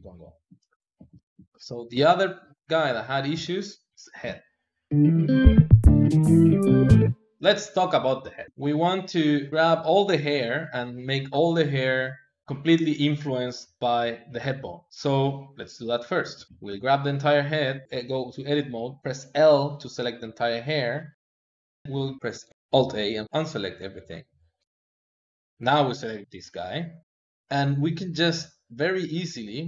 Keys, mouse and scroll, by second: 1.4 KP_1, 2.0-4.9 shift+middle drag, 7.4 shift+middle click, 8.4 KP_3, 8.9-12.3 shift+middle drag, 12.4 click, 13.8 click, 14.9 click, 16.4 shift+middle click, 16.5 Tab, 19.0 l, 21.4-23.0 ctrl+middle drag, 23.0-23.9 a, 25.0 click, 25.5 l, 28.3-29.6 drag.